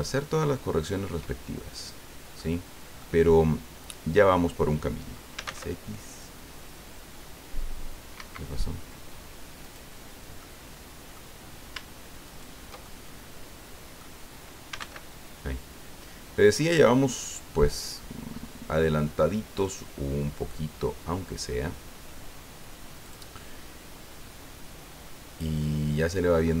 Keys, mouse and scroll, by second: 0.5-2.5 middle drag, 2.7 scroll down 2, 3.0-4.6 middle drag, 5.3 s, 5.4 x, 8.2 Escape, 9.6 right click, 10.4 middle click, 12.2 shift+right click, 12.8-14.1 shift+middle drag, 14.7 s, 14.8 x, 17.2-18.9 scroll up 10, 19.5-20.0 scroll up 2, 23.0 click, 23.4 click, 23.4-26.6 middle drag.